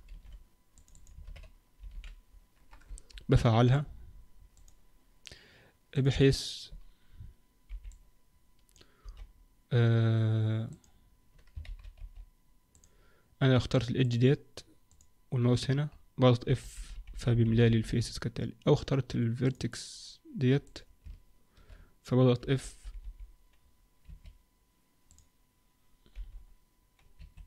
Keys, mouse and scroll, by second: 7.7 b, 9.0 x, 11.7 ctrl+z, 11.9 x, 14.0 click, 14.9 click, 16.5 f, 16.7-17.9 f, 19.5 click, 20.6 click, 22.4 f, 25.1 click, 26.1 f.